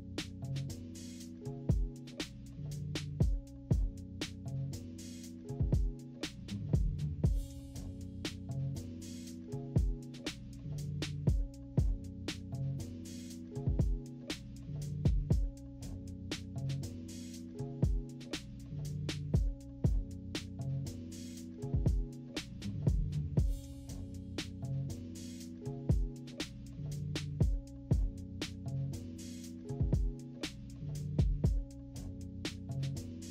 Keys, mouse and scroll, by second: 0.1 click, 0.5 click, 1.0 -, 1.2 scroll down 2, 1.4 =, 1.5 scroll up 2, 1.8 click, 3.2 click, 4.4 -, 4.4 =, 4.5 scroll down 2, 4.6 scroll up 2, 4.7 click, 5.2 click, 5.5 click, 5.7 click, 6.2 click, 7.0 click, 7.7 -, 7.9 scroll down 2, 8.2 click, 8.4 =, 8.5 click, 8.5 scroll up 1, 8.9 click, 9.4 click, 10.1 -, 10.2 =, 10.4 scroll down 1, 10.6 click, 10.7 click, 12.9 click, 13.5 click, 14.2 click, 14.8 click, 14.9 click, 15.3 click, 16.0-18.1 typing, 16.1 scroll down 2, 16.3 click, 17.2 click, 17.2 scroll down 2, 18.0 scroll up 1, 18.7 click, 19.2-21.9 drag, 22.1 -, 22.3 scroll up 1, 22.4 click, 22.5 -, 22.6 =, 22.8 scroll up 1, 22.9 =, 23.0 scroll down 2, 23.7 click, 24.4 click, 25.5 -, 25.6 scroll up 2, 26.0 click, 26.2 scroll down 1, 26.6 click, 27.1 click, 27.2-28.3 drag, 28.4 click, 28.9 click, 29.3 click, 29.5 click, 29.7 click, 30.3 -, 30.6 click, 30.7 -, 30.8 =, 30.9 click, 30.9 =, 31.0 scroll down 2, 31.2 click, 32.0 click, 32.6 click.